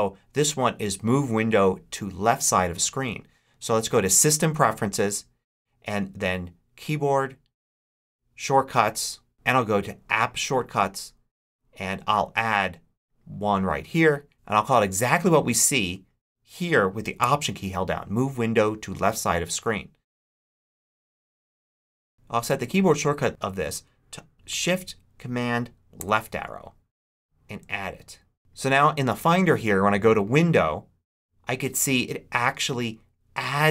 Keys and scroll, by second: 20.4-22.1 typing, 25.9 shift+super+Left.